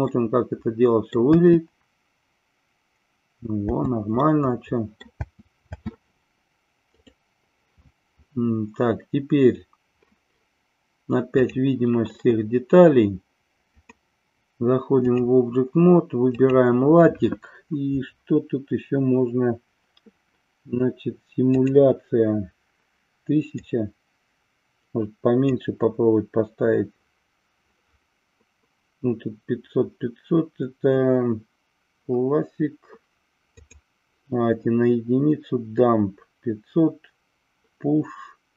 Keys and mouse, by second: 0.1-1.2 middle drag, 1.2 space, 3.6 space, 4.2 middle click, 6.8 click, 13.8-15.2 drag, 16.2 click, 21.4 click, 23.4-25.4 drag, 33.6 click.